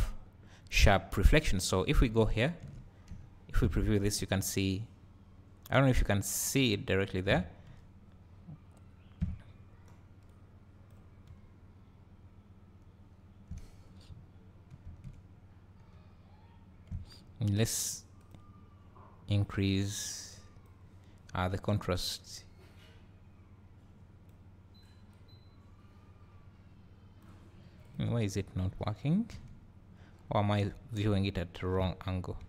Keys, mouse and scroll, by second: 1.9 click, 2.4 ctrl+shift+click, 3.2 `, 3.8 scroll up 3, 4.2 `, 4.6-5.7 middle drag, 10.3 click, 11.3 `, 15.4 scroll up 3, 16.0 `, 18.4 drag, 21.8-28.0 drag, 29.5 `.